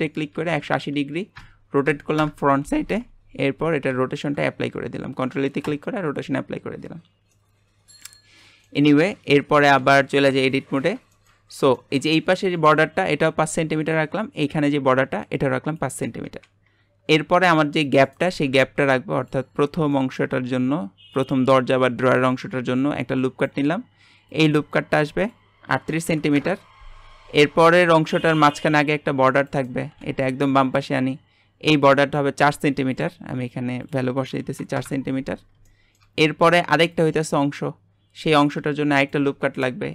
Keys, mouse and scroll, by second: 3.9 ctrl+a, 7.3-9.8 middle drag, 9.8 Tab, 10.4-11.4 middle drag, 11.4-11.7 scroll up 1, 11.7 shift+middle click, 12.2-16.5 scroll up 1, 16.6-17.4 scroll down 1, 17.4 ctrl+r, 18.4 g, 19.5-19.9 scroll up 1, 19.9-21.1 shift+middle drag, 21.1 click, 24.3 click, 25.2-28.2 drag, 28.3 ctrl+r, 29.9 g, 31.7 click, 32.9 click, 33.8-35.6 drag, 35.6 shift+middle click, 36.2-38.7 scroll up 1.